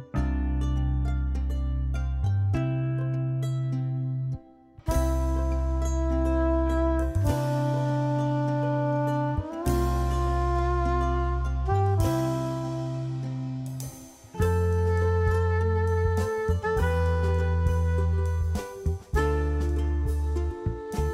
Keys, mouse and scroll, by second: 0.8-6.8 drag, 8.1 q, 8.8-21.1 drag.